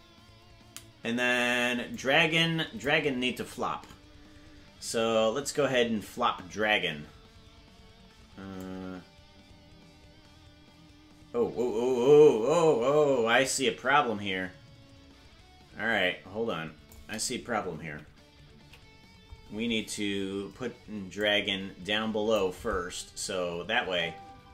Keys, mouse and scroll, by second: 1.9 click, 8.6-16.9 drag, 17.9 Right, 18.7 Left, 21.2-22.4 drag, 23.8 space.